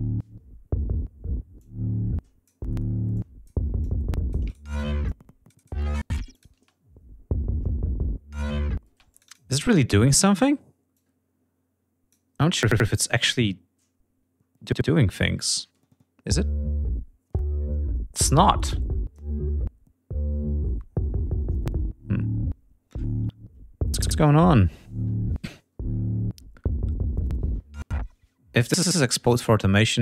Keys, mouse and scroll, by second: 1.5 click, 2.9 alt+click, 3.6 alt+click, 4.8 alt+shift+click, 5.6 alt+space, 5.9 alt+click, 8.5 space, 8.7 click, 10.5-11.8 drag, 15.1 click, 15.5 space, 27.3 space.